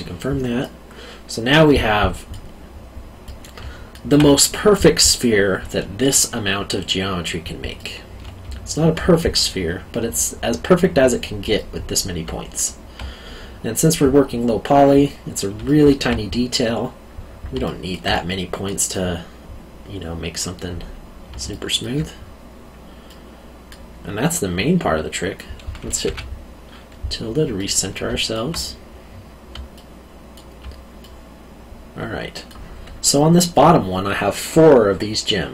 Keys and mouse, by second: 0.6 middle click, 3.2 middle click, 3.6 alt+middle click, 7.7 middle click, 8.4 alt+middle click, 11.5 middle click, 12.2 alt+middle click, 15.6 alt+middle click, 17.6 alt+middle click, 18.1 middle click, 21.5 alt+middle click, 23.0 middle click, 26.0 `, 27.5 middle click, 28.0 alt+middle click, 29.7 alt+middle click, 31.0 middle click.